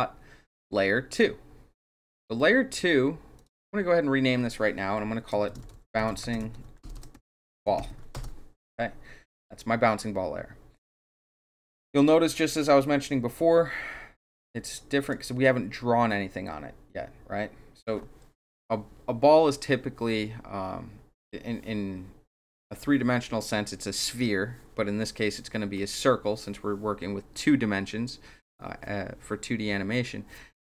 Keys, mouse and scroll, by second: 3.3 click, 3.5 click, 5.4-8.2 typing, 11.9 click, 15.0 click.